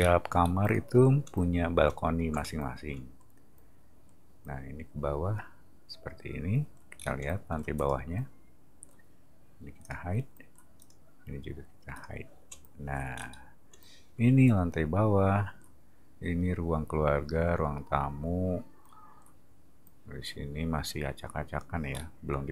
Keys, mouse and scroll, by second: 7.0 middle click, 7.8 click, 9.8 click, 10.8 click, 11.9 click, 13.1-13.7 middle drag, 21.9-22.5 middle drag.